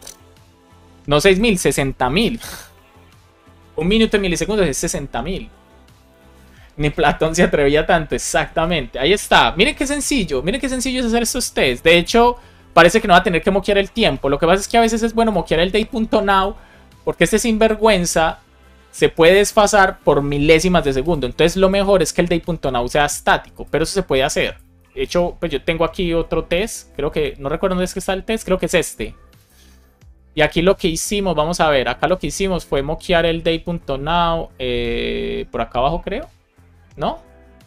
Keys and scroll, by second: 2.3 super+s, 11.9 super+c, 24.7 super+c.